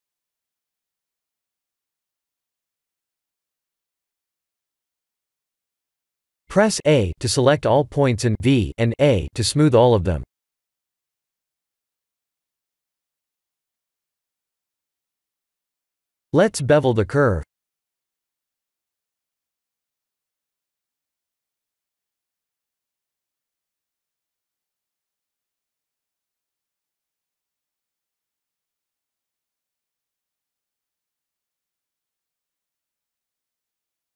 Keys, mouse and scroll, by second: 1.1 shift+middle click, 1.9 e, 3.3 shift+middle click, 3.4 shift+middle click, 3.6 shift+middle click, 4.0 e, 5.9 Tab, 6.4 Tab, 6.7 a, 7.4 v, 7.8 Tab, 8.2 scroll down 4, 8.5 shift+z, 9.6 shift+z, 10.7 shift+middle click, 10.8 shift+middle click, 13.4 click, 14.4-16.2 scroll down 4, 16.4 click, 18.5 shift+click, 21.3-21.8 scroll up 3, 22.0 shift+middle click, 22.0 shift+middle click, 22.1 shift+middle click, 22.5-23.3 scroll up 2, 22.8 Tab, 23.3 scroll down 1, 23.7 click, 24.3 Tab, 25.0-26.2 scroll down 5, 26.2 scroll down 3, 26.4 shift+middle click, 27.2 click, 29.0-29.4 scroll up 3, 29.4 Tab, 29.9 shift+middle click, 30.2 shift+middle click, 30.4-31.8 scroll up 2, 31.8 click, 32.4 click, 33.0 g.